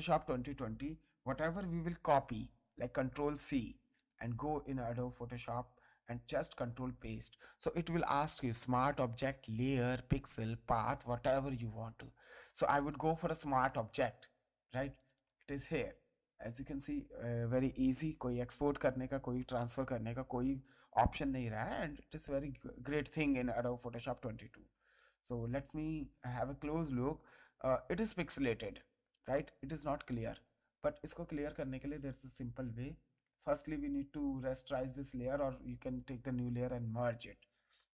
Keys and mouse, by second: 1.8 ctrl+c, 3.9 click, 5.9 ctrl+v, 12.8 click, 14.9 click, 23.5 click, 24.9 click, 26.8 space, 27.4 ctrl+click, 28.2 ctrl+click, 29.0 ctrl+click, 30.2 ctrl+click, 31.3 ctrl+click, 32.8 click, 33.7 ctrl+click, 35.1 ctrl+e, 35.9 ctrl+space, 36.4 ctrl+click, 36.9 click.